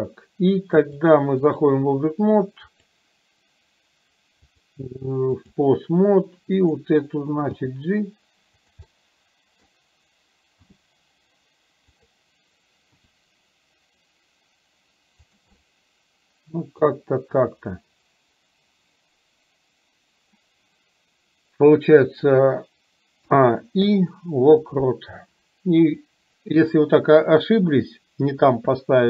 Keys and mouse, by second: 1.1-1.8 drag, 4.6-5.8 drag, 6.8 drag, 7.8 g, 9.0 middle click, 13.0 r, 15.5-17.0 middle drag, 23.3 a, 23.9 i, 25.9 click.